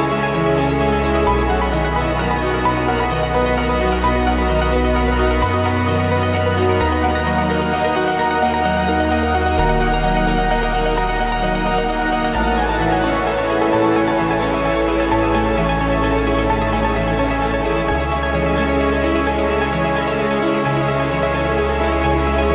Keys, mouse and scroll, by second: 2.5 click, 3.7 ctrl+click, 5.0 click, 5.8-8.8 drag, 8.9 0, 9.3 scroll down 2, 9.9-10.6 scroll up 4, 11.3 scroll down 2, 12.4 click, 14.2 click, 15.8 click, 16.7 5, 17.2 0, 18.3 click, 19.2 6, 19.6 0, 20.5 click, 21.2 2, 21.7 0, 22.4 click.